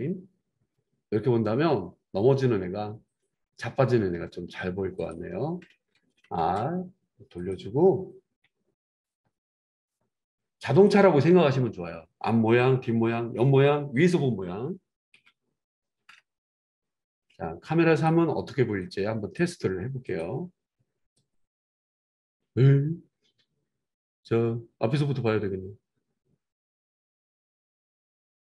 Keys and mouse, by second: 3.7-5.1 right drag, 5.1-9.2 middle drag, 6.4 r, 9.2-18.1 drag, 18.1-18.8 middle drag, 18.8-28.5 drag.